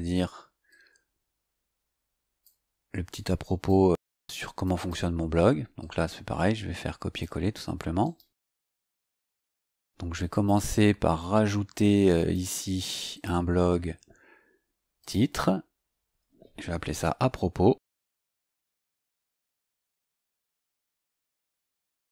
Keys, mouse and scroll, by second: 0.6-2.6 drag, 3.1 click, 4.0 click, 5.7-7.3 drag, 8.0 right click, 8.9 click, 10.3 click, 12.1 click, 13.1 click, 14.9 click, 17.8 Caps_Lock, 19.1-20.8 typing.